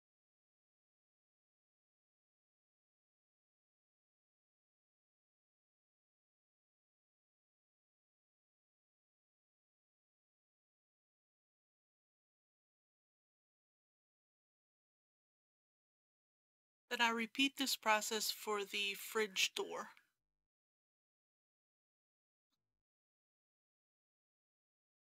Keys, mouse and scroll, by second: 1.1 alt+click, 2.9 alt+shift+click, 4.7 ctrl+b, 6.3-7.4 drag, 9.4 KP_Decimal, 9.6 KP_0, 9.8 KP_3, 15.0 click, 16.0 Return, 21.4 click, 21.7 scroll down 1, 22.0 click, 22.1 shift+middle click, 22.4-22.9 scroll up 1, 22.9 scroll down 1, 23.0 scroll up 1, 23.2 click, 23.5-25.1 typing, 23.7 click, 24.0 Tab, 24.3 click.